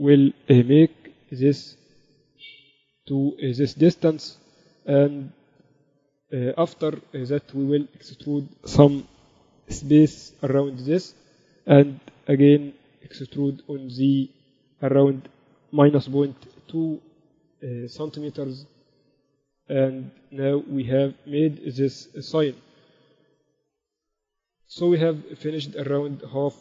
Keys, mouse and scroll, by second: 0.0 a, 1.0 b, 2.0-3.9 drag, 6.1-8.0 drag, 8.0-9.4 middle drag, 9.4 e, 10.1 click, 12.2 e, 18.4-20.2 drag, 21.0 Tab, 21.2-23.2 typing, 23.8 ctrl+s.